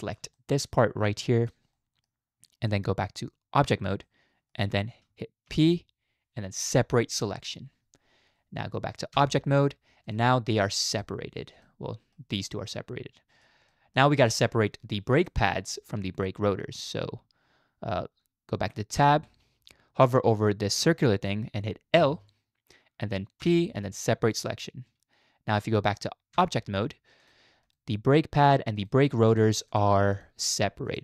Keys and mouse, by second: 0.4 shift+middle click, 1.1 click, 1.7 middle click, 2.7 middle click, 3.2 z, 4.1 shift+middle click, 5.5 p, 9.2 Tab, 10.9 click, 11.6-12.1 middle drag, 12.7-13.4 drag, 12.7-13.1 middle drag, 13.7 click, 14.2 drag, 15.2 middle click, 19.0 Tab, 21.9 l, 23.4 p, 26.4 Tab, 27.2-28.9 drag, 29.7 click, 30.1 click, 30.5 click.